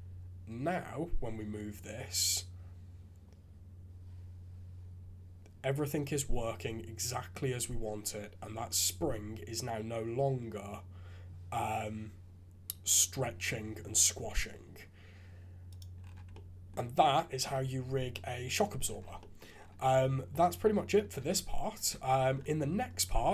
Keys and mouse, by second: 16.3-16.7 drag, 17.5-18.1 drag, 19.2 drag, 19.9 shift+z, 20.3 click, 20.7 click, 21.2 shift+z, 21.9 shift+c.